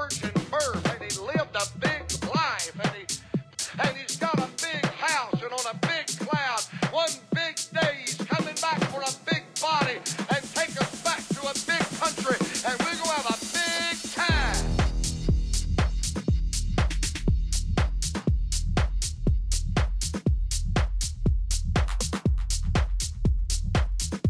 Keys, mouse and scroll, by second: 0.0-1.6 typing, 2.6 b, 4.6-6.5 drag, 6.6 e, 10.9 s, 17.0 e, 22.7-24.2 middle drag, 23.7 z.